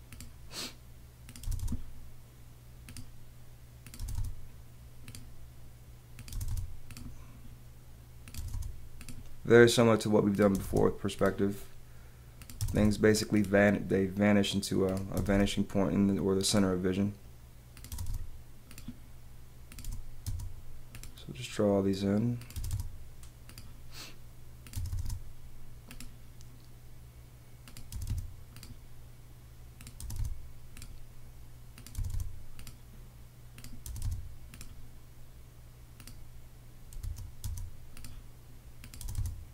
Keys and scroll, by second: 1.4 space, 2.5 space, 4.0 space, 5.1 space, 6.3 space, 9.0 space, 10.5 space, 11.2 space, 12.6 space, 13.4 space, 15.1 space, 17.9 space, 18.7 space, 19.8 space, 20.9 space, 22.5 space, 23.5 space, 24.7 space, 27.9 space, 28.5 space, 30.0 space, 31.9 space, 33.0 space, 33.8 space, 34.9 space, 37.0 space, 38.0 space, 39.0 space.